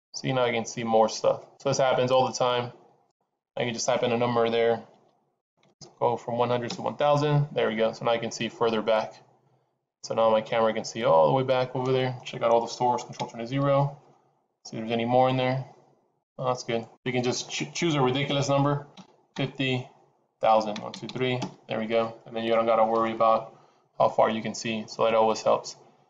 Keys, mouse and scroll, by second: 3.4 click, 5.6 KP_0, 6.4 KP_0, 10.4 middle click, 13.2 ctrl+alt+KP_0, 15.2 click, 16.7 click, 20.8 KP_0, 21.0 KP_0.